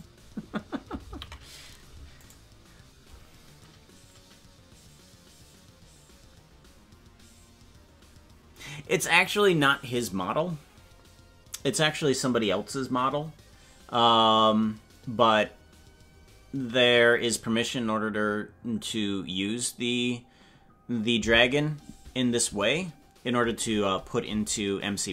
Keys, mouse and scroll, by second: 1.1 ctrl+z, 2.2-9.8 right drag.